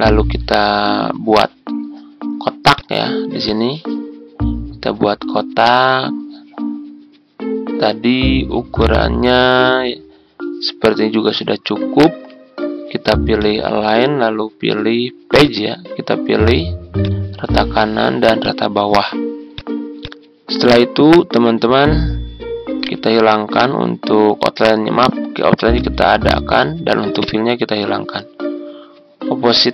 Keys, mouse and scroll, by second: 22.8 right click, 25.7 click.